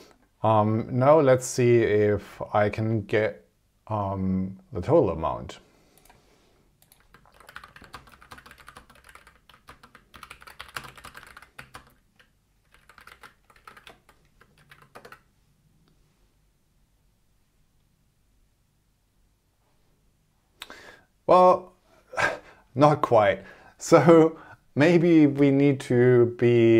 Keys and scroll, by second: 7.8-9.7 typing, 14.5 shift+?, 14.9 super+Return.